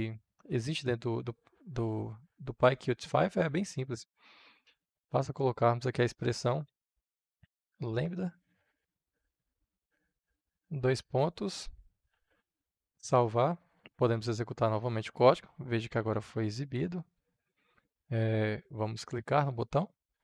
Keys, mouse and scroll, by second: 6.4-10.9 typing, 12.2 ctrl+s, 13.1 click, 14.0 F5, 16.4-20.2 drag.